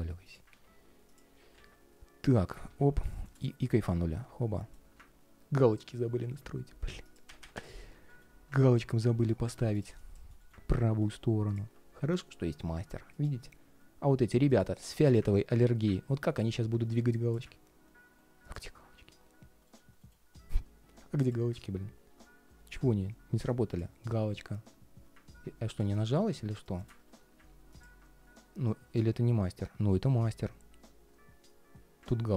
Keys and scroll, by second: 0.2 super+x, 2.2 super+v, 2.4 alt+a, 7.8 ctrl+shift+3, 10.1 ctrl+shift+3, 19.4 ctrl+shift+3, 20.6 ctrl+shift+3.